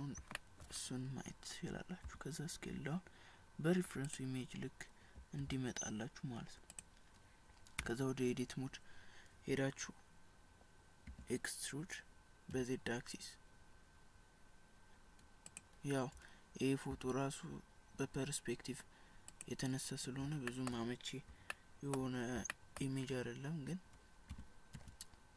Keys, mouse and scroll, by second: 0.4 shift+middle click, 2.1 s, 5.2 g, 8.0 Tab, 11.1 e, 16.9 s, 20.6 shift+middle click, 20.8 scroll down 3, 21.6 shift+middle click, 22.2 scroll up 2, 24.3 e.